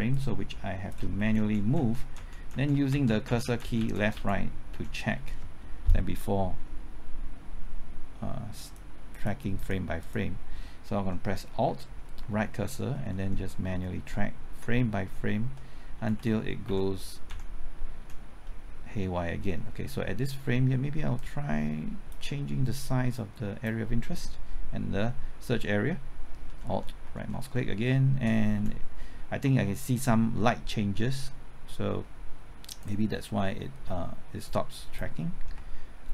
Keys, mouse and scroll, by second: 0.1 shift+click, 1.1 shift+Left, 1.3 Right, 1.3-2.9 typing, 2.5 Right, 2.7 Left, 2.9 Right, 3.1 Left, 3.2 Right, 3.4 Left, 3.6 Right, 3.8 Left, 3.9 Right, 4.1 Left, 4.7 Right, 8.6 click, 11.6-13.2 typing, 12.2 alt+Right, 16.0 Left, 16.6 Right, 18.0 Left, 21.1-22.7 drag, 24.8 typing, 26.6 alt+Right, 27.0 alt+Right, 27.3 alt+Right, 27.4 alt+Right, 27.6 alt+Right, 28.5 Left, 32.8-35.5 drag.